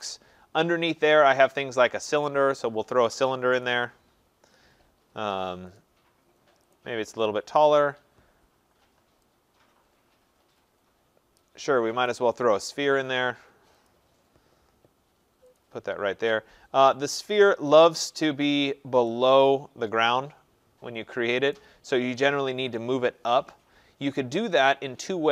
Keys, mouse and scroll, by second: 2.3 click, 3.7 click, 5.8 click, 6.8 click, 12.1 click, 13.9 click, 15.6 click, 17.6-18.9 scroll, 21.6 right click, 22.1 scroll, 22.3 click.